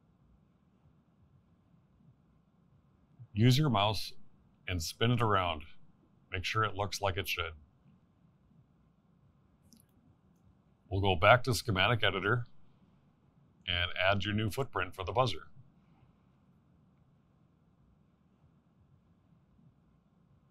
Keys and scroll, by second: 1.0 1, 1.5 8.